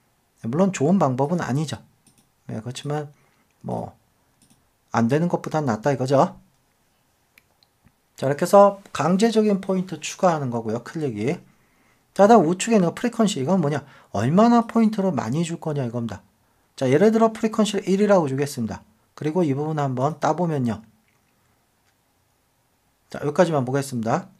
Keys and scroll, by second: 11.3 super+d.